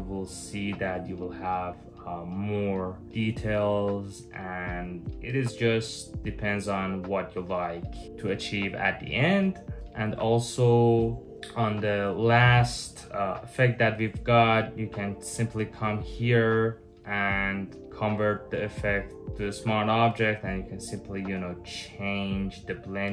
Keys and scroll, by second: 5.7 super+z, 6.1 super+z, 10.6 super+z, 10.8 super+z, 11.0 super+z.